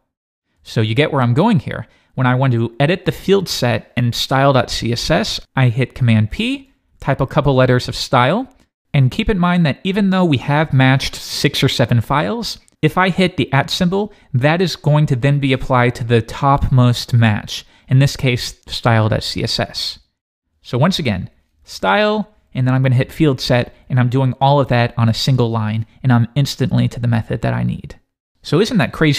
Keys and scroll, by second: 0.8 Escape, 5.4 Escape, 6.3 super+p, 13.6 shift+@, 20.0 Escape, 21.3 super+p.